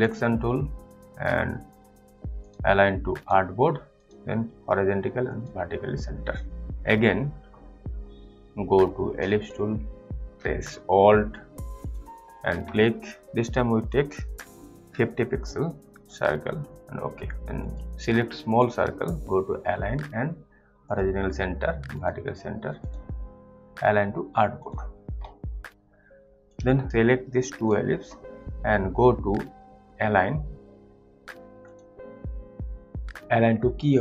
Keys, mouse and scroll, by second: 9.4 click, 11.8 alt+click, 14.8-15.3 typing, 16.0 click, 20.9 click, 26.8 click, 27.0 click, 31.6 click.